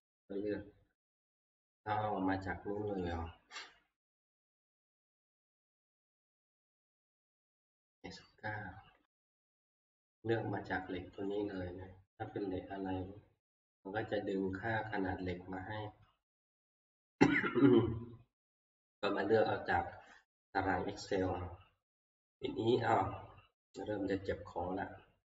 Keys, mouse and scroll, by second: 0.2 click, 3.0 click, 4.4 click, 4.5 click, 8.7 Escape, 10.1 click, 11.3 click, 12.3 click, 14.5 click, 16.7 click, 18.8 click.